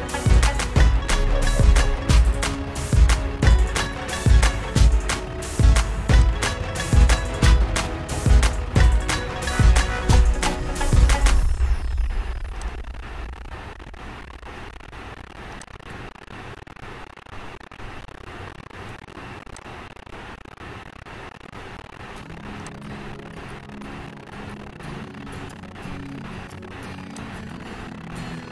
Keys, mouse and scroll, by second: 1.2 Return, 4.5 click, 6.7 click, 6.9-8.9 shift+scroll, 8.9-11.2 shift+scroll, 13.0 click, 15.9 click, 16.6-18.3 shift+scroll, 18.5 shift+scroll, 19.8 click, 23.0 click, 24.0-24.6 shift+scroll.